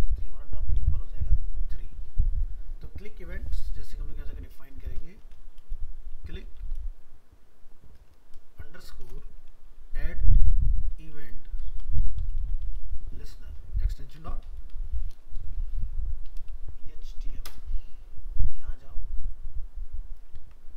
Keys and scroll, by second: 16.5 ctrl+shift+Left, 17.2 ctrl+c, 20.4 ctrl+v.